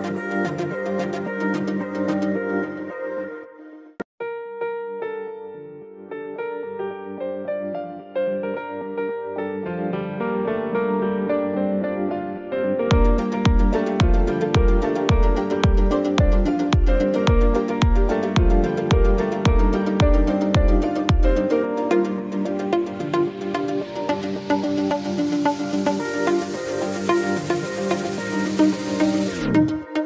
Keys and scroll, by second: 3.8 ctrl+d, 5.1 ctrl+d.